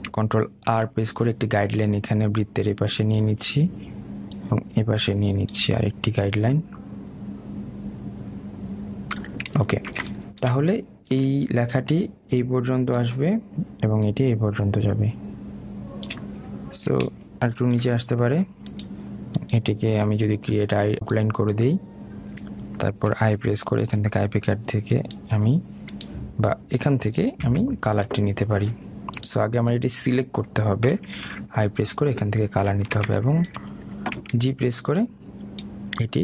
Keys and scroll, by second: 2.1 ctrl+r, 19.1 shift+Down.